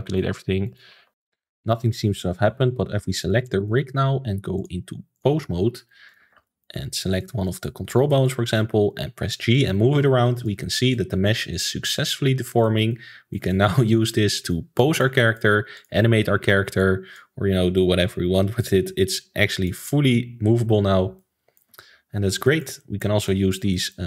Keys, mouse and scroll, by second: 0.6 click, 0.9 ctrl+s, 1.1-3.2 shift+middle drag, 3.2 click, 3.5-4.5 middle drag, 4.5-5.7 drag, 5.7-6.1 shift+middle drag, 6.1 click, 6.3 ctrl+s, 6.4-7.2 middle drag, 7.2 click, 7.4-7.9 middle drag, 7.9 scroll up 2, 8.1-8.4 middle drag, 8.4 g, 10.6-11.5 middle drag, 11.5 click, 11.7 g, 12.9-15.7 middle drag, 15.7 click, 16.8 click, 17.7 click, 19.1 click, 20.8 alt+g, 21.1-21.8 middle drag, 21.8-22.4 scroll down 5, 22.4-24.0 shift+middle drag.